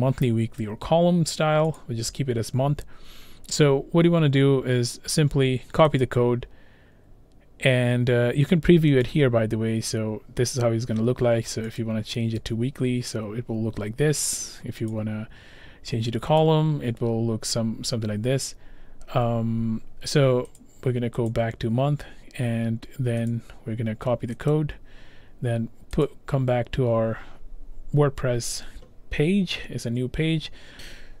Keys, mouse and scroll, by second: 1.8 click, 6.1 click, 9.1 click, 11.8 click, 12.5 click, 14.9 click, 16.4 click, 18.5 scroll, 18.7 scroll down 6, 18.8 scroll up 1, 19.1-19.6 scroll down 5, 20.6 click, 21.3 click, 21.3-22.3 scroll, 23.3 click, 24.5 click.